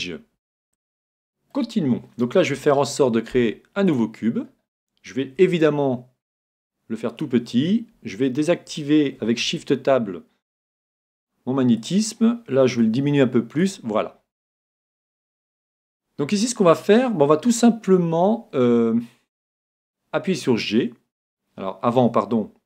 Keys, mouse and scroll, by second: 0.7-3.1 middle drag, 4.4 scroll down 1, 4.7-6.5 middle drag, 5.4 s, 7.2-9.1 drag, 10.8 g, 11.9-13.6 drag, 12.8 s, 13.8-15.5 drag, 14.1-16.1 middle drag, 14.3 s, 20.3 g.